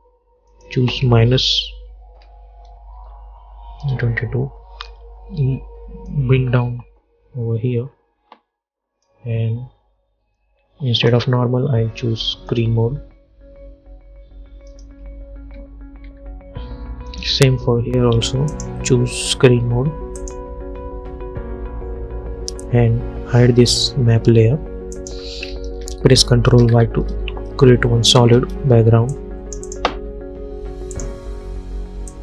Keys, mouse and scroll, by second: 2.4 -, 3.1 Return, 5.5 p, 6.2-10.2 drag, 10.2 F4, 11.1 click, 15.5 u, 16.2 u, 17.2 click, 23.8 click, 26.6 ctrl+y, 28.3 Return, 29.2-32.2 drag.